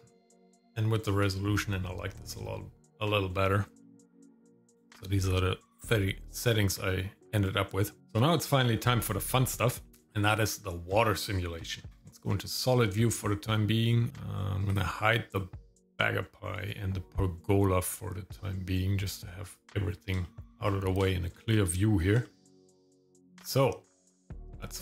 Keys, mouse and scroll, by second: 2.1 scroll down 1, 2.5 middle click, 3.8 middle click, 5.7 scroll down 1, 6.4 scroll down 1, 11.0 shift+middle click, 12.2 click, 14.7 click, 15.8 click, 19.5 click, 20.2 shift+middle click, 20.6 scroll up 2, 21.0 shift+middle click, 22.2 shift+middle click, 22.6 middle click, 22.8-23.2 scroll up 2.